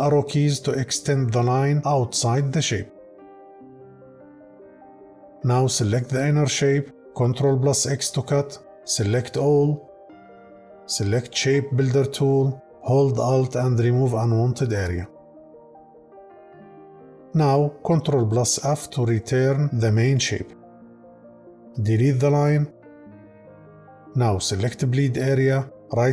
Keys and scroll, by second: 7.1 ctrl+x, 17.9 ctrl+f, 22.4 Delete.